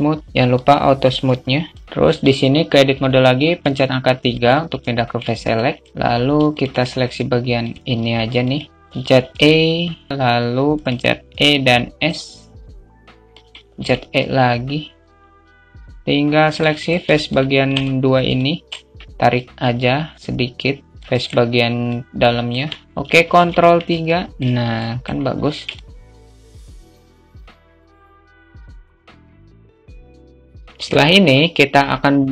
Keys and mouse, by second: 2.9 Tab, 2.9 3, 4.3 alt+shift+middle click, 6.1 shift+click, 7.0 shift+click, 8.4-15.9 shift+middle drag, 15.9 Tab, 16.2 click, 17.2 alt+middle click, 17.7 alt+shift+middle click, 18.7-20.4 drag, 20.6 alt+middle click, 21.3 click, 22.1 Tab, 23.2 ctrl+3, 23.4 alt+shift+middle click, 24.1 middle click, 25.1-26.1 alt+middle drag, 26.1 Tab, 27.8 i, 28.1 middle click, 28.2 i, 28.9 ctrl+r, 30.6 middle click.